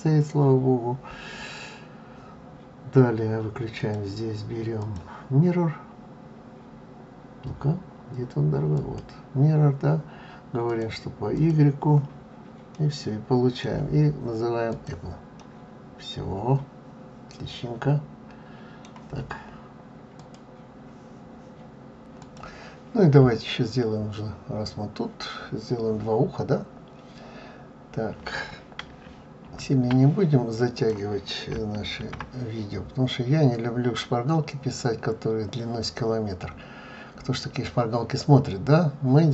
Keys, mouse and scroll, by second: 3.8 l, 4.8 click, 11.4 click, 12.7 middle click, 14.7 click, 15.4 middle click.